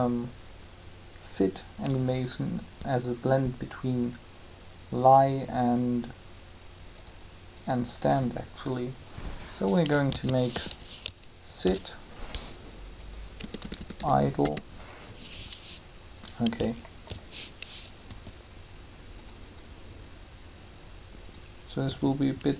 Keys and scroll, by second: 10.1-10.6 typing, 11.6 shift+-, 13.4 BackSpace, 14.3 Return, 18.0 r, 21.8 r.